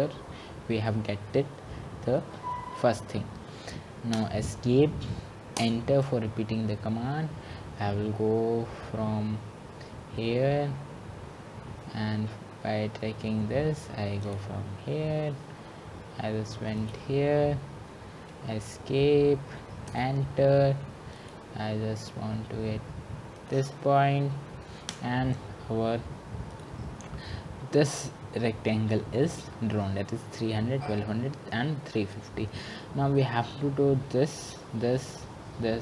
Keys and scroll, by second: 6.0 Escape, 20.2 Escape, 25.3 Return.